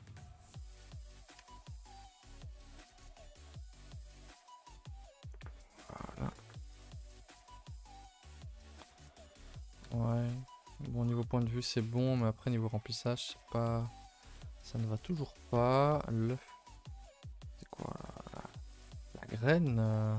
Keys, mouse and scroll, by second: 0.6 click, 1.4 Tab, 1.5 scroll down 3, 1.7 a, 1.8 a, 1.9-2.3 middle drag, 2.3 scroll down 1, 2.4 middle drag, 2.6-3.1 scroll up 2, 3.1 scroll down 3, 3.2 a, 3.3 a, 4.1 click, 4.9 middle drag, 5.1 scroll down 2, 5.3-5.9 middle drag, 5.9 a, 6.0 a, 6.2 middle drag, 6.4 ctrl+s, 6.5-8.8 middle drag, 8.8-9.2 scroll up 2, 9.2-9.9 middle drag, 9.9 KP_0, 10.7-11.7 scroll down 2, 11.7-12.1 middle drag, 12.1-13.0 scroll up 9, 12.4 middle drag, 13.0-13.5 shift+middle drag, 13.5 scroll up 1, 13.8-14.1 middle drag, 14.1 click, 14.3-15.3 middle drag, 15.3 r, 16.9 s, 18.3 r, 19.0-19.8 middle drag, 19.8 r.